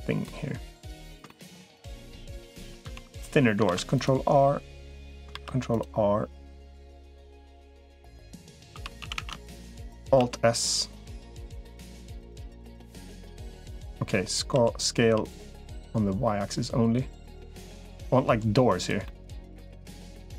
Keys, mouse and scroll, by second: 0.0 middle click, 1.1 shift+middle click, 1.5 middle click, 2.5 ctrl+z, 2.7 ctrl+z, 3.5 ctrl+r, 5.1 ctrl+r, 8.7 3, 8.9 a, 9.3 alt+shift+click, 10.1 alt+s, 13.6 middle click, 14.3 s, 18.8-19.9 middle drag, 20.0 middle click.